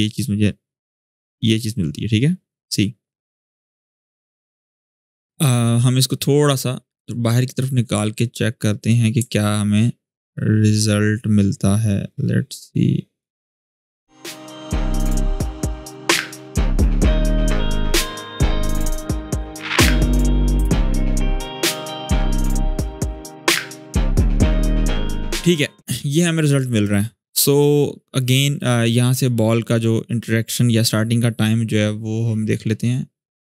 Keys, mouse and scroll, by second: 8.7-14.2 drag, 14.2-18.0 drag, 18.0-25.8 ctrl+drag, 29.4-33.4 drag.